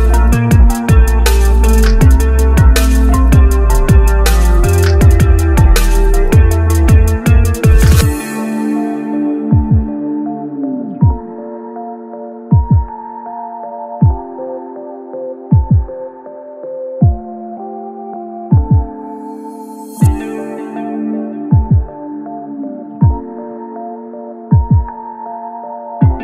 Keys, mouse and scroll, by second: 1.1 Tab, 1.7 click, 2.0-3.1 middle drag, 3.1 scroll up 1, 3.3 Tab, 3.5 middle click, 4.4-5.5 drag, 5.8 Tab, 7.2 click, 7.8-8.9 middle drag, 8.9 click, 12.2 click, 14.8 click, 15.5-17.0 middle drag, 17.2 Tab, 17.4-17.8 scroll up 1, 17.8 click, 18.7 alt+click, 19.4 e, 20.0 Tab, 20.3 middle click, 21.2 click, 21.6 Tab, 22.3 middle click, 22.8 Tab, 23.0 middle click, 23.7-24.1 scroll up 1, 24.1 shift+middle click, 24.7 click, 25.0 scroll up 1, 25.3-26.2 shift+middle drag.